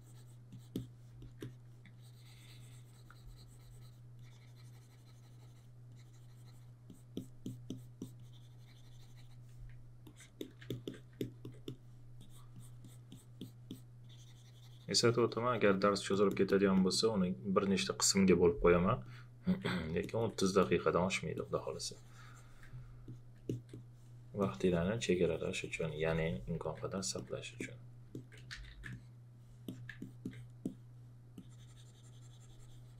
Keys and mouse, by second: 1.2 alt+click, 4.1 click, 10.0 alt+click, 10.7 alt+click, 11.2 alt+click, 19.0 alt+click, 20.0 alt+click, 23.5 alt+click, 24.4 alt+click, 26.6 alt+click, 28.5 shift+f, 28.9 click.